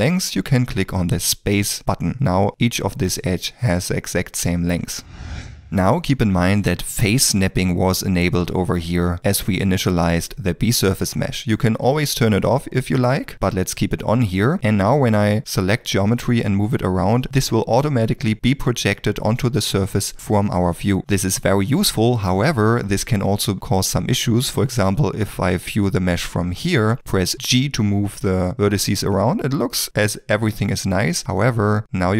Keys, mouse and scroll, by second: 13.3 middle click, 14.9 g, 17.6 middle click, 20.6 g, 22.4 ctrl+middle click, 22.9 middle click, 31.2 middle click.